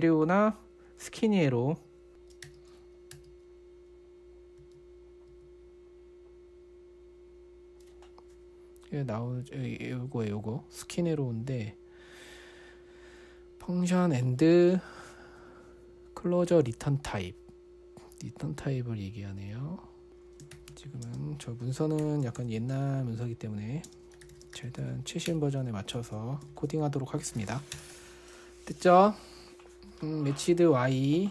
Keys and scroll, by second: 2.1-3.5 typing, 5.0-5.7 typing, 19.8-28.7 typing.